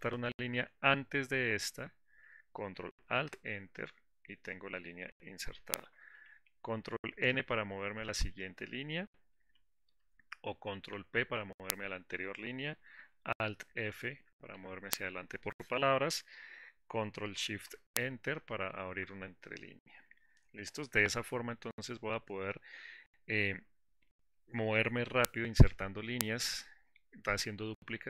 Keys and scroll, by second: 3.5 ctrl+alt+Return, 18.0 ctrl+shift+Return.